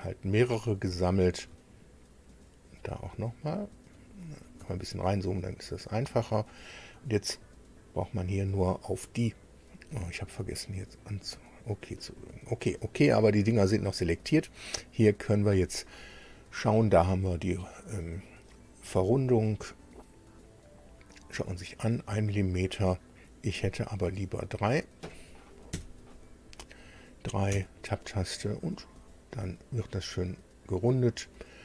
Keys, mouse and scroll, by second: 0.0 ctrl+click, 0.6 ctrl+middle click, 0.7 ctrl+scroll down 1, 4.0-4.5 ctrl+scroll up 3, 5.9 ctrl+click, 6.5-6.8 ctrl+scroll down 3, 7.3-8.5 middle drag, 11.1 click, 19.0 click, 20.8-21.2 scroll up 1, 21.5 scroll down 1, 24.7 click, 25.7 KP_3, 27.5 Tab, 29.3-31.6 middle drag.